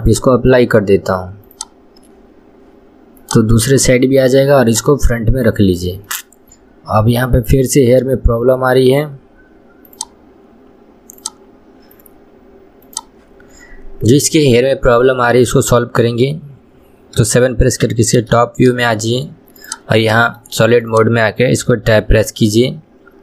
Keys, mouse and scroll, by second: 0.2-3.3 drag, 3.4 click, 4.8-5.7 drag, 6.3-9.3 middle drag, 14.7-17.5 middle drag, 17.5 KP_7, 18.7-19.9 shift+middle drag, 19.9 click, 20.5-21.1 shift+middle drag, 21.1 click.